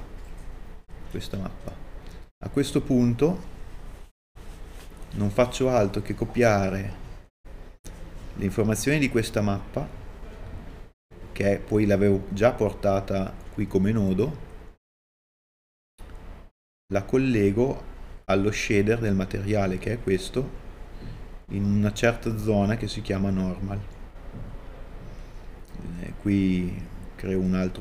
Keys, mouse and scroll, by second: 3.9 click, 4.4 click, 6.0 middle click, 15.9-16.5 scroll down 1, 16.5-17.7 middle drag, 26.4 middle click, 27.3-27.8 drag.